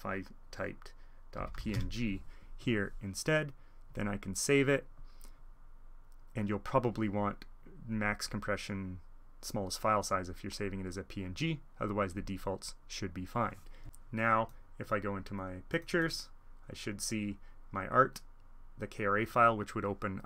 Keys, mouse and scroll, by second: 1.2-2.2 typing, 1.5-2.6 drag, 3.8-4.3 drag, 6.6-8.2 drag, 12.1 click, 13.8-15.5 drag, 15.6-19.2 drag.